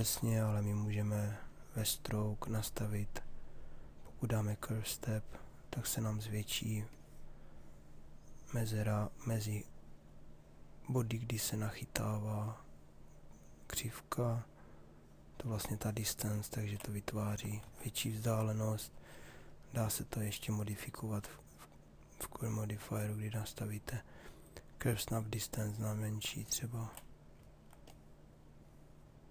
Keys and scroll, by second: 0.0 ctrl+z, 17.3 ctrl+z.